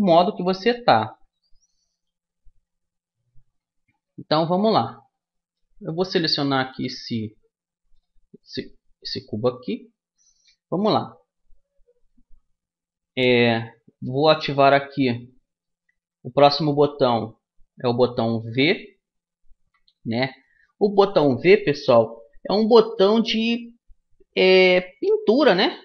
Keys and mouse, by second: 6.4-8.1 right drag, 7.1 Tab, 9.9-15.0 middle drag, 18.1 v, 23.1-25.1 middle drag.